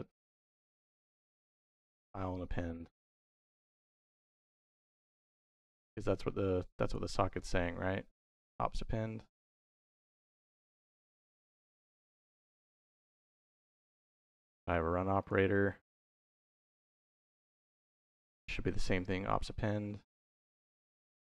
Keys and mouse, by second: 0.9-4.7 drag, 6.7 click, 7.2 middle click, 11.4 click, 12.2 shift+v, 15.0 click, 15.4 middle click, 17.6 click, 19.9 middle click, 20.9 middle click.